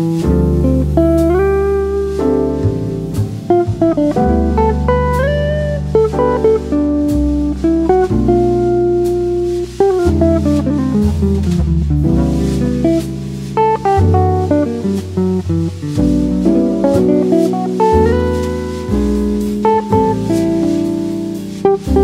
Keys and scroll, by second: 13.8 shift+m, 17.8 v, 21.7 e.